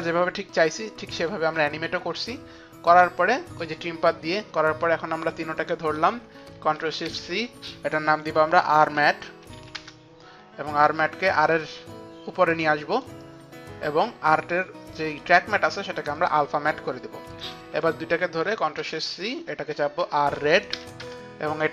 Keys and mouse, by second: 2.0 click, 3.0 click, 5.5 click, 5.6 shift+click, 6.5 shift+click, 7.1 ctrl+shift+c, 7.1 shift+click, 8.4-9.8 typing, 9.8 Return, 11.0 click, 15.3 click, 16.2 click, 17.9 shift+click, 19.0 ctrl+shift+c, 19.0 shift+click, 19.8 r, 20.0 space, 20.4 e, 21.0 Return, 21.0 d.